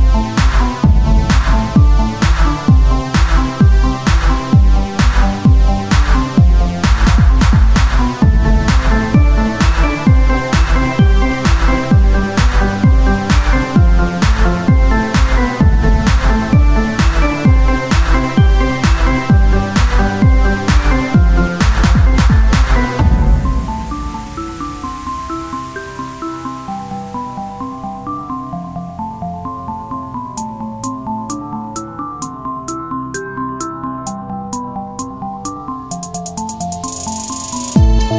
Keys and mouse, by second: 1.2 KP_1, 2.7 click, 3.0 middle click, 4.0 click, 4.2 shift+a, 4.8 click, 5.0 s, 5.8 z, 6.5 s, 7.6-11.8 drag, 9.4 s, 12.6-13.8 right drag, 13.1-14.5 drag, 14.1 z, 14.5-15.7 right drag, 15.2-20.5 drag, 18.4 s, 21.6-23.9 drag, 24.8 Tab, 24.8 click, 26.3 ctrl+r, 28.5 KP_1, 28.7 z, 29.4 z, 30.4 ctrl+Tab, 31.8 g, 33.3 s, 35.1-36.4 drag, 36.5-38.1 right drag.